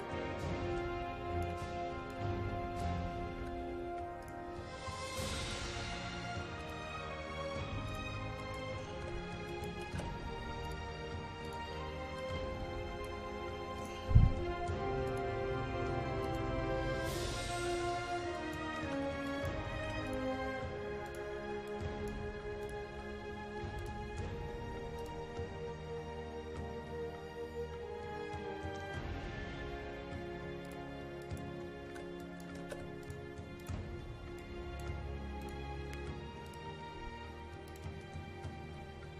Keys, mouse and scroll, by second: 1.6 KP_5, 2.2 click, 3.4 KP_7, 3.6 KP_5, 4.3 click, 8.7-10.0 typing, 9.6 click, 10.7 click, 13.3 KP_5, 13.9 click, 18.7-19.9 typing, 19.4 click, 20.3 click, 22.1 click, 22.3 KP_5, 22.7 click, 31.5-32.8 typing, 32.3 click, 33.1 click, 34.9 KP_5, 35.5 click.